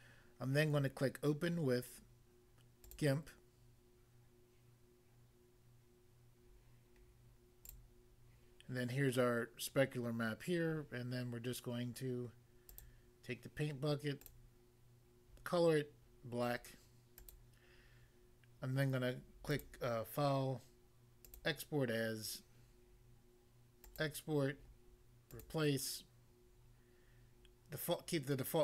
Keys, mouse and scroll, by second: 2.9 click, 7.7 click, 12.7 click, 14.2 click, 14.3 click, 17.2 click, 19.5 click, 21.2 click, 21.3 click, 23.9 click, 24.0 click, 25.4 click.